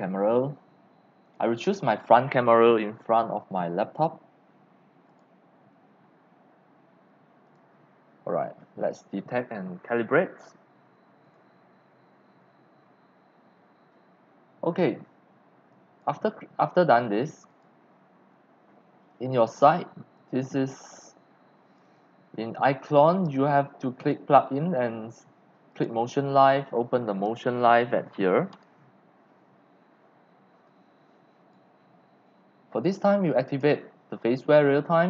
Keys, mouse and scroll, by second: 1.2 click, 5.1 click, 6.8 click, 7.4 click, 11.2 click, 15.0-15.4 drag, 15.6-16.0 drag, 17.5 click, 20.1 click, 21.1 click, 21.1 z, 22.0 click, 23.0 click, 24.0 click, 25.7 click, 26.2 scroll down 1, 28.5 click, 30.6-31.5 drag, 33.4 click.